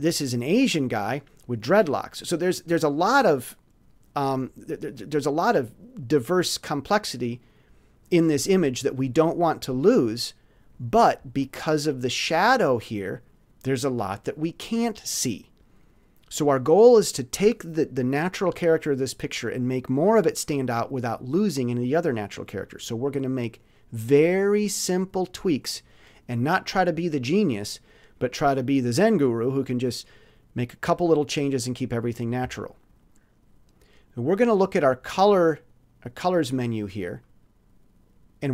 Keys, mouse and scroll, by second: 32.2 click.